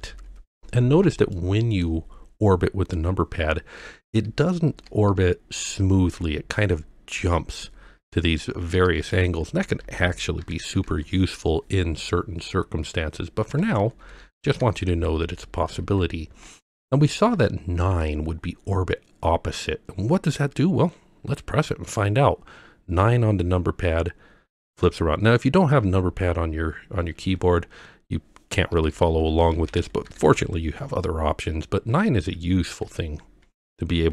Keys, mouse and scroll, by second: 0.0-0.1 typing, 1.3-1.9 middle drag, 3.4-11.6 typing, 13.0-17.4 typing, 23.0 KP_9, 24.5 KP_9, 25.8 KP_9, 27.2 KP_9, 28.7-30.3 typing, 31.4-34.1 typing.